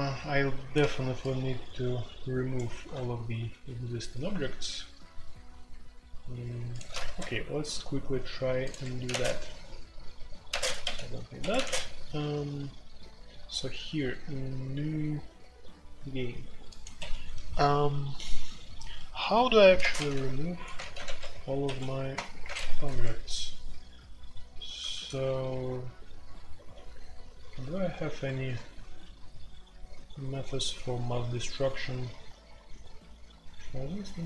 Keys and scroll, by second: 7.0 shift+c, 8.8 Escape, 9.1 Tab, 9.1 space, 10.5-11.5 typing, 11.4 Escape, 11.6 Tab, 16.9 Escape, 19.8-21.6 typing, 22.1 Return, 24.9 ctrl+d, 25.4 ctrl+d, 26.7 ctrl+d, 28.2 typing, 33.7-34.2 typing.